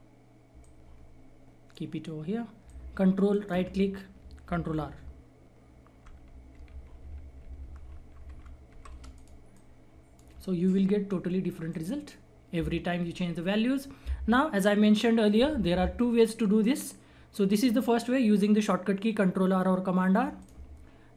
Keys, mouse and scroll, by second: 3.3 ctrl+right click, 3.8-4.2 scroll down 1, 4.7 ctrl+r, 9.1 click, 20.3 click.